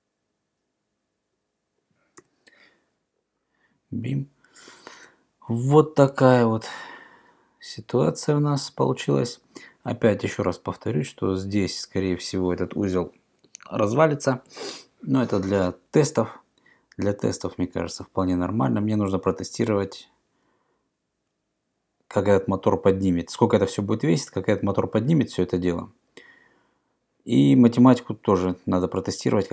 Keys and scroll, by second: 2.2 BackSpace.